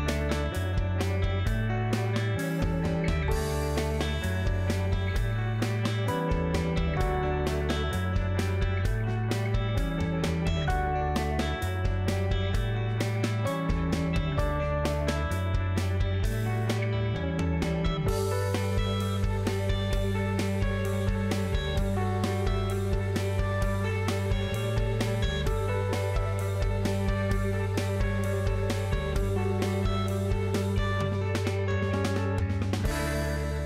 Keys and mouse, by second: 0.3 alt+shift+click, 1.7 middle click, 6.5 KP_3, 8.6 ctrl+i, 9.7 middle click, 10.6 KP_Decimal, 11.8 middle click, 13.0 g, 15.6 middle click, 16.9 KP_3, 18.1-19.9 middle drag, 21.4 alt+z, 24.0 shift+click, 26.2 alt+click, 27.4 KP_Decimal, 29.5-30.9 ctrl+drag, 31.4 alt+z, 31.7-33.1 drag.